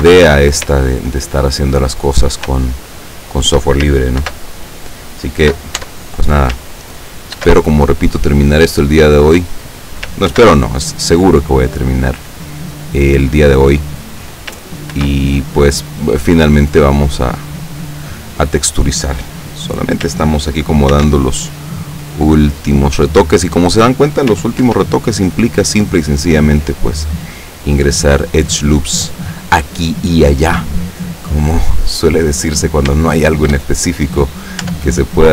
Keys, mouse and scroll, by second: 0.0 Tab, 2.1 right click, 2.8-3.7 shift+middle drag, 4.3 ctrl+r, 5.8 Tab, 7.4 ctrl+r, 7.9 ctrl+click, 9.1 click, 10.3 ctrl+r, 10.9 click, 13.7 click, 15.0 ctrl+r, 15.5 ctrl+click, 18.0 click, 21.0 ctrl+r, 21.6 ctrl+click, 23.6 click, 24.8 ctrl+r, 25.7 click, 28.6 click, 31.5-33.0 scroll down 1, 33.0 shift+middle click, 33.8-34.7 scroll up 1, 34.8 Tab, 35.2 right click.